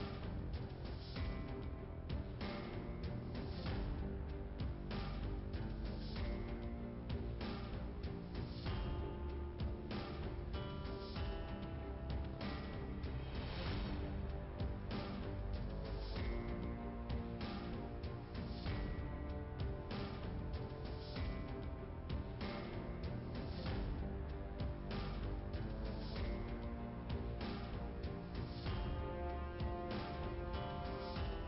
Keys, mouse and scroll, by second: 0.0 click, 0.1 click, 1.6 click, 2.7 click, 3.9 click, 5.6 click, 13.4 click, 15.5 Delete, 17.2 click, 19.6 click, 21.2 click, 21.9 click, 22.4 click, 24.0 click, 27.9 click.